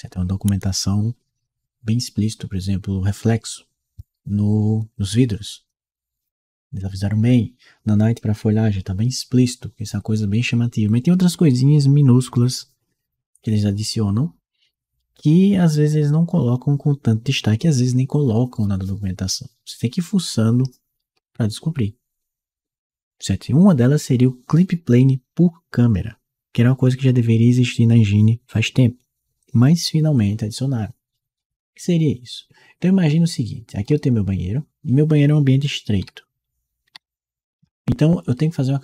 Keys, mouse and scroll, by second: 33.6-38.1 right drag, 36.7 d, 37.4 a.